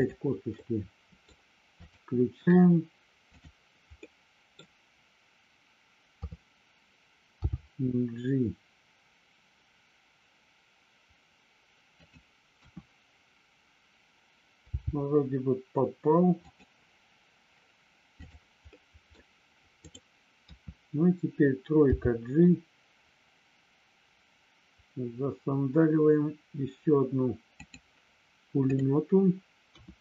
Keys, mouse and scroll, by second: 0.5 scroll up 1, 0.7 middle click, 1.8 click, 4.0 middle click, 6.1 KP_3, 7.4 g, 11.9 click, 12.7 KP_1, 14.8 g, 16.4 click, 18.7 scroll up 1, 18.8 middle click, 19.8 click, 20.4 KP_3, 21.9 g, 27.5 click, 28.7 click, 29.7 KP_1.